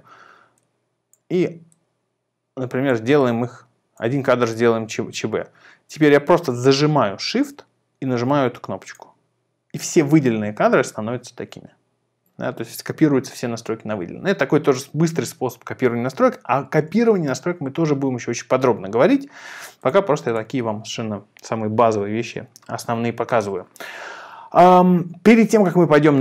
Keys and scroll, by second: 16.2 super+a, 17.0 super+r.